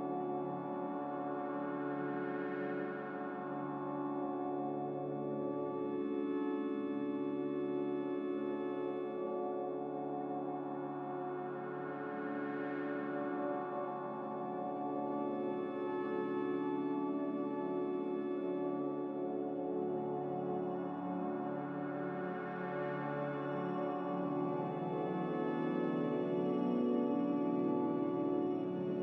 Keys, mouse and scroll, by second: 8.3 z, 11.4 typing, 12.7 Return, 12.7 typing, 18.6-19.4 typing, 21.5-22.3 typing, 24.2 ctrl+z, 24.6 ctrl+z, 27.7 1.